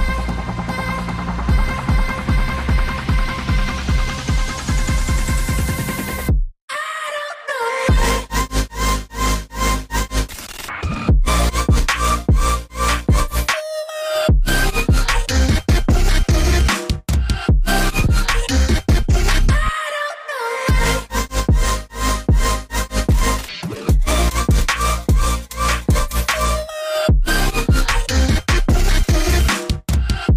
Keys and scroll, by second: 0.7 v, 5.8 ctrl+alt+2, 10.7 a, 11.2 ctrl+2, 11.5 g, 13.4 v, 15.4 a, 16.0 g, 18.4 v, 23.1 Escape, 23.7 Escape, 27.2-27.6 typing.